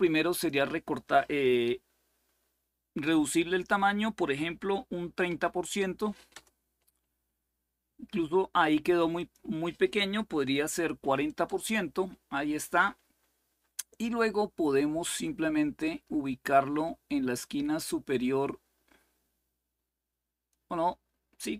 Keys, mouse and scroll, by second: 0.0-2.7 drag, 3.1 Delete, 3.3 Delete, 5.0 3, 6.1 Return, 9.6 click, 9.9 Delete, 10.7 4, 11.2 Return, 15.5-20.9 drag, 21.4 click.